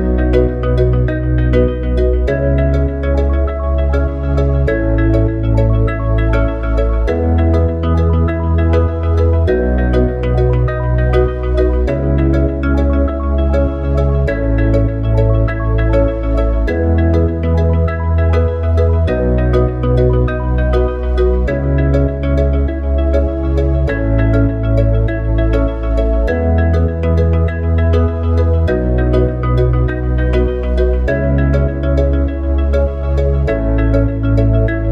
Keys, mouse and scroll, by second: 0.3 s, 8.0 Tab, 9.2 click, 12.7 click, 20.6 Tab, 21.3 click, 22.4 s, 29.0 Tab, 30.2 s, 32.9 click.